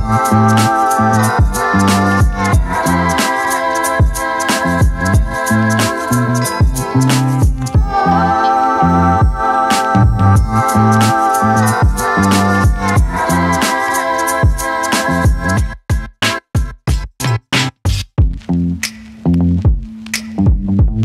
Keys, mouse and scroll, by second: 7.4 click.